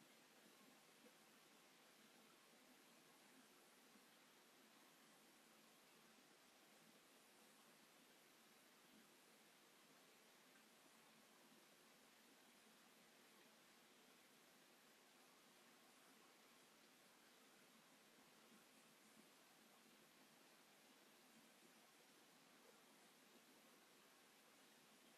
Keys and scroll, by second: 23.4 space.